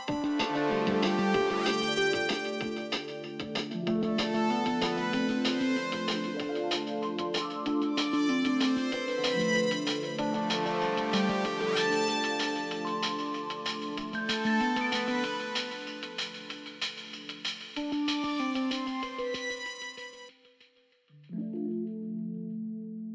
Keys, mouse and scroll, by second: 0.8 double click, 2.4-3.6 typing, 7.2 ctrl+z, 9.9 right click, 11.8 double click, 12.3 right click, 12.3 alt+scroll up 1, 13.4-21.4 drag, 13.4 right click, 22.1 ctrl+z.